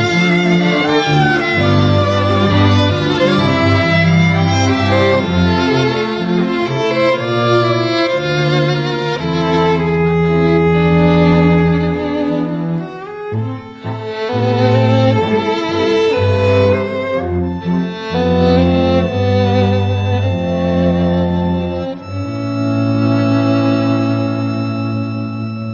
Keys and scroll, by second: 14.9 t.